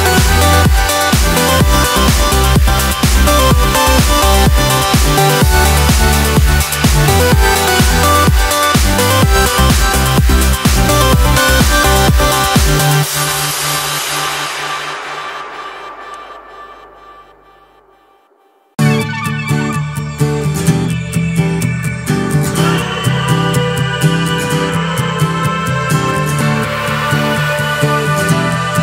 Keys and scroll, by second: 0.0 ctrl+t.